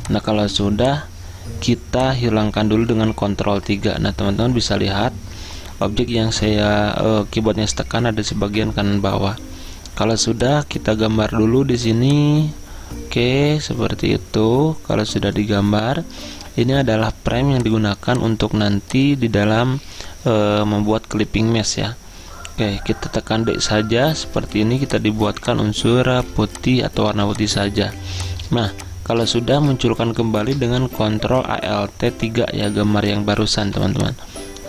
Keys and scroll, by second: 0.1-1.1 typing, 3.3 ctrl+3, 26.3-28.0 typing, 30.3 ctrl+alt+3, 33.7 v.